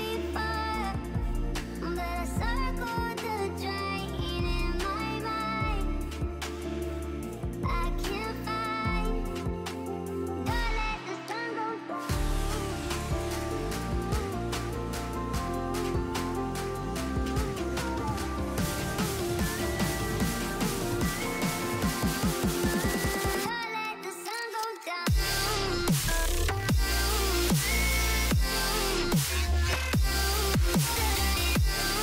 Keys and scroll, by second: 1.6-3.1 typing, 4.4-5.2 typing, 6.5-7.2 typing, 12.1-13.2 typing, 13.2 Return, 15.1 ctrl+l, 16.2-20.9 typing, 16.9 Return, 28.4 ctrl+l.